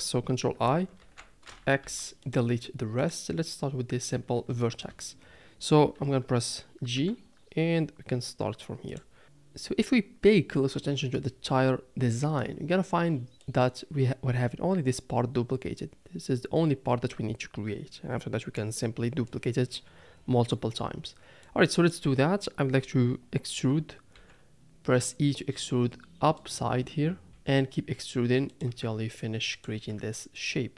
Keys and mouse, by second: 1.0 ctrl+i, 1.8 x, 4.6 shift+click, 6.9 g, 13.6-18.6 drag, 19.5-20.5 drag, 21.5 click, 25.2 e, 27.3 e, 29.7 e.